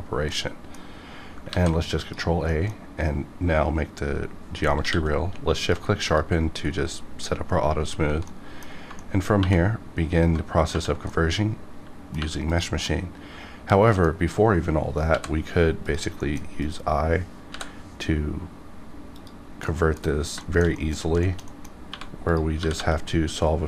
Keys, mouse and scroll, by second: 0.3 middle click, 0.6-1.3 scroll down 2, 1.5 ctrl+a, 1.9 click, 2.4 middle click, 2.5 middle click, 4.7 q, 5.5 shift+click, 5.7 shift+click, 6.0 click, 8.2 middle click, 9.0 middle click, 9.4 2, 10.6 typing, 11.1 middle click, 12.2 3, 12.5 click, 12.8-15.1 middle drag, 15.8 click, 16.2 middle click, 16.6 click, 19.1 click, 19.6 middle click, 19.9 middle click, 20.0 scroll up 1, 20.4 shift+middle click, 20.7 scroll up 1, 20.7 middle click, 21.2 shift+middle click, 21.6 middle click, 21.6 scroll down 1, 21.7 scroll up 1, 21.9 1, 22.3 click, 22.5 g, 22.7 g.